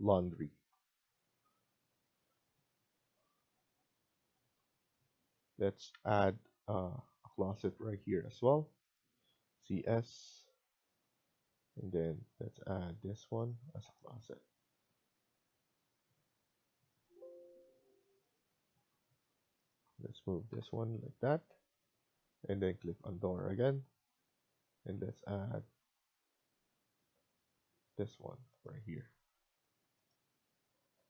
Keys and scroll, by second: 7.6 Escape, 9.4 typing, 12.6 typing, 18.6 Escape, 18.8 Escape, 20.4 Left, 20.8 Escape, 21.1 Escape, 29.0 Escape, 29.3 Escape, 30.8 Right.